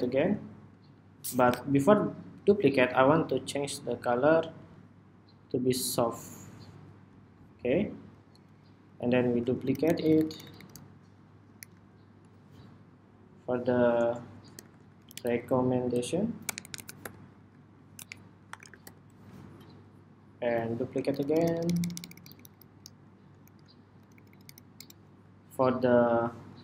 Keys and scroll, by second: 0.1 super+d, 8.9 super+d, 11.3 alt+shift+Right, 20.3 super+d, 23.1 alt+shift+Right, 23.7 alt+Right, 23.9 alt+Right, 24.0 alt+Right, 24.2 alt+Right, 24.5 alt+Right, 25.8 alt+Right.